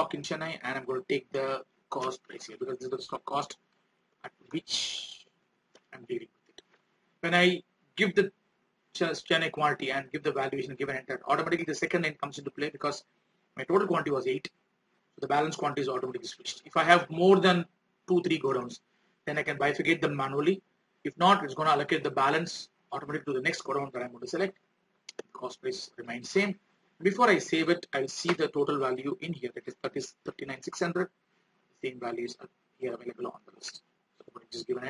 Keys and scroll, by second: 30.9 alt+Tab.